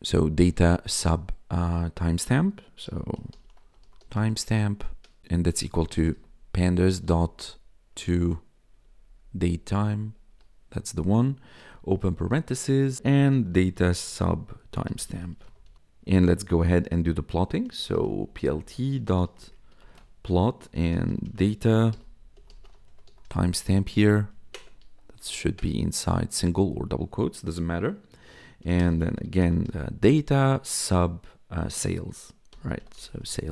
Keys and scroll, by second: 0.6 [, 2.6-7.1 typing, 4.7 Right, 8.5 Down, 10.2 Tab, 11.6 shift+9, 12.7-16.1 typing, 17.5-24.8 typing, 24.4 ctrl+shift+Left, 25.2 Right, 26.3 space, 26.6 Left, 28.3-30.1 typing, 32.2-33.5 typing.